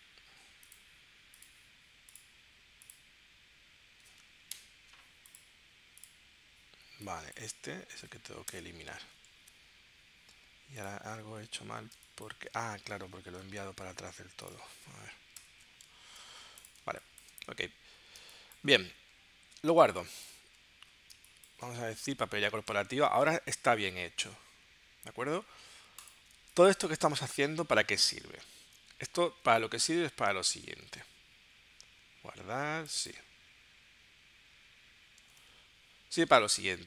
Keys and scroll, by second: 4.5 shift+super+9, 8.5 BackSpace, 9.3 super+y, 11.9 space, 13.2 super+y, 15.3 shift+super+0, 16.0 super+y, 16.8 space, 18.3 space, 19.8 space, 21.2 space, 23.0 super+s, 26.4 space, 27.4 super+y, 28.6 super+y, 30.7 super+w, 35.5 super+Tab.